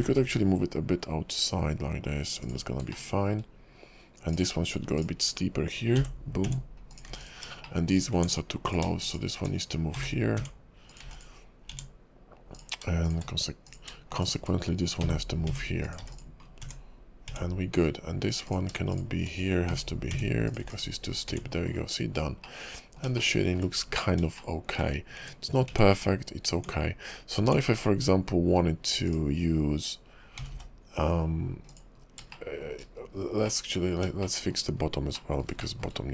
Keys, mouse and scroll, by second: 3.0 shift+middle click, 4.3 click, 5.0 shift+click, 6.1 j, 6.4 Tab, 6.9 click, 7.0 x, 7.6 shift+middle click, 8.1 Tab, 8.6 click, 9.1 shift+click, 10.1 j, 10.4 Tab, 10.9 click, 11.0 x, 11.7 Tab, 11.9 Tab, 12.5 click, 13.0 shift+click, 13.6 click, 14.1 shift+click, 15.2 j, 15.4 Tab, 15.8 click, 16.0 x, 16.4-16.9 scroll down 4, 16.6 Tab, 17.3 Tab, 18.4 click, 18.9 shift+click, 19.8 j, 20.1 Tab, 20.5 click, 20.6 x, 21.1-21.9 scroll down 5, 21.2 Tab, 22.4 middle click, 23.2 shift+middle click, 23.8-24.3 scroll up 6, 24.4 shift+middle click, 25.0 scroll up 1, 25.2 Tab, 25.7 Tab, 26.5 Tab, 27.4 Tab, 29.0 click, 30.4 g, 32.0 scroll down 1, 32.3 shift+middle click, 32.9-33.4 scroll down 8, 33.4 middle click, 34.2 shift+middle click, 34.7-35.1 scroll up 3, 35.1 middle click, 35.9-36.1 scroll up 5.